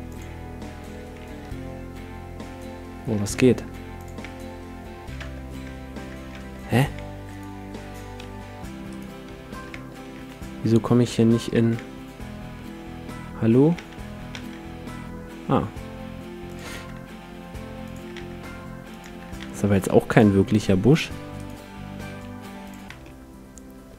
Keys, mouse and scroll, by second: 1.4 e, 3.3 g, 4.2 e, 5.2 Tab, 5.6 e, 6.3 Tab, 6.8 e, 7.5-10.8 right drag, 8.2 s, 9.3 e, 9.7 Tab, 10.1 e, 11.5 shift+e, 13.7 d, 14.4 shift+d, 16.5-23.9 drag, 16.7 shift+d, 18.2 shift+d, 19.4 shift+d, 20.5 s, 21.3-23.2 right drag, 22.1 s, 22.9 a, 23.0-23.9 middle drag.